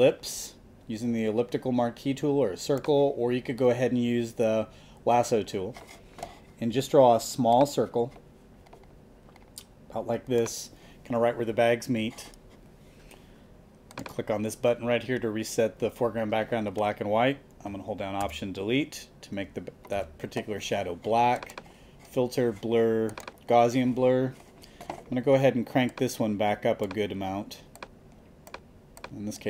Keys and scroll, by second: 18.2 alt+BackSpace, 19.9 super+d.